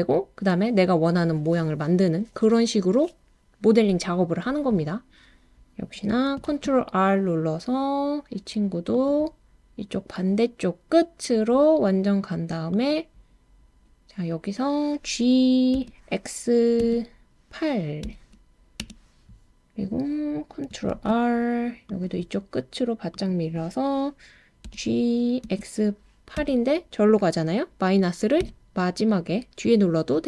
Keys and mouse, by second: 6.5 super+r, 12.7 click, 15.7 g, 16.8 x, 18.0 8, 18.8 Return, 20.9 super+r, 23.1 click, 24.7 g, 25.4 x, 26.4 8, 28.4 -.